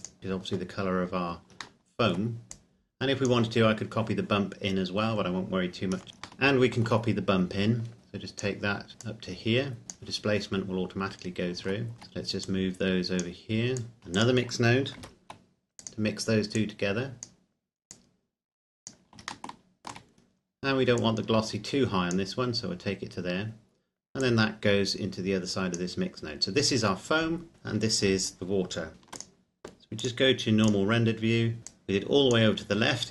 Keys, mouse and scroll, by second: 1.8 shift+middle click, 2.5 scroll down 1, 2.6 click, 4.5-5.2 scroll down 1, 5.2-6.0 scroll up 1, 6.0 scroll down 1, 6.5 shift+middle click, 7.9 click, 9.2 click, 11.0-11.7 scroll up 1, 11.9 shift+middle click, 12.7 click, 15.2 shift+d, 15.9 click, 18.2 click, 19.5 shift+middle click, 20.1-21.0 scroll up 1, 21.0 click, 22.9-24.2 scroll down 1, 24.2 click, 26.1-28.9 scroll down 1, 28.9 ctrl+s, 29.2 click, 31.6 scroll up 1, 31.9 click.